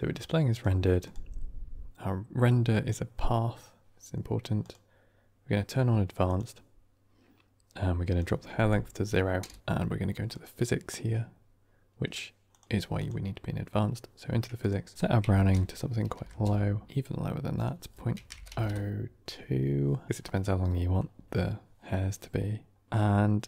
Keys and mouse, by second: 0.4 click, 0.9 click, 4.5 click, 6.2 click, 8.2-9.6 drag, 10.2 click, 12.9 click, 14.6-16.8 drag, 17.6-19.7 drag, 20.3 middle click.